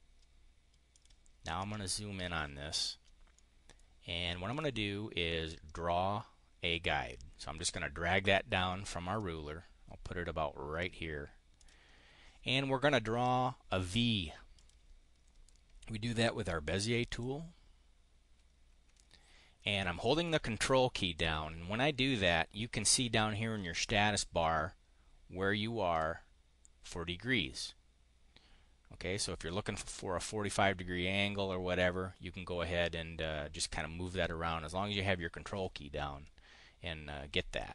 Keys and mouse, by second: 0.9 click, 1.5 click, 3.2 click, 4.4 click, 5.4-10.8 drag, 11.5 click, 14.5 click, 17.0 click.